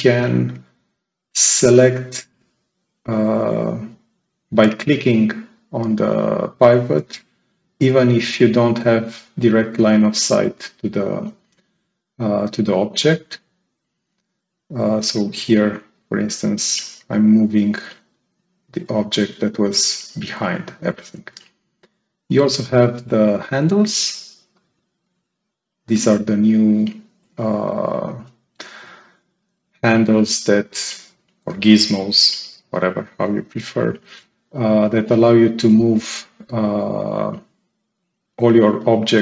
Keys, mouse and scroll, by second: 15.9-18.9 drag, 23.4 click, 24.4 click, 27.5-28.7 right drag, 27.5-28.7 drag, 30.1-31.5 right drag, 30.2-31.0 drag, 32.6 click, 34.1-34.5 scroll up 2, 34.7-36.1 right drag, 34.8-36.1 drag.